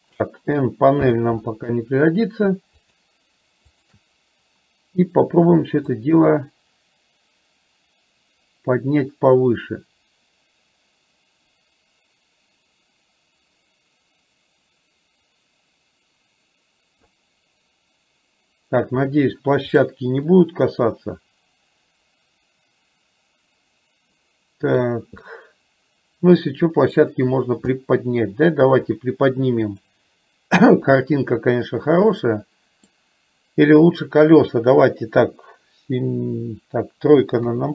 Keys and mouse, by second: 1.0 n, 2.9 shift+click, 3.9 shift+click, 6.4-17.1 drag, 19.8 click, 20.4-24.9 middle drag, 25.4-27.0 middle drag, 27.9 middle click, 29.9-32.0 drag, 32.3 middle click, 37.5 KP_3.